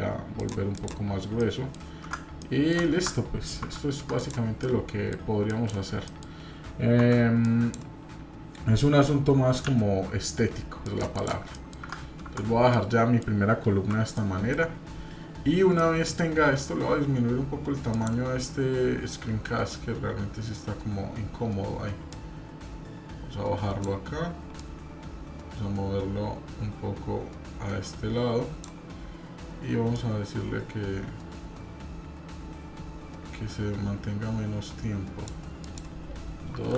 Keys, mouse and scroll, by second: 1.4 middle click, 1.4 scroll down 2, 2.4 middle click, 4.6 middle click, 6.1 middle click, 11.5 middle click, 12.7 middle click, 14.1 middle click, 23.2-28.7 drag, 29.9-35.3 drag, 35.6-36.7 drag.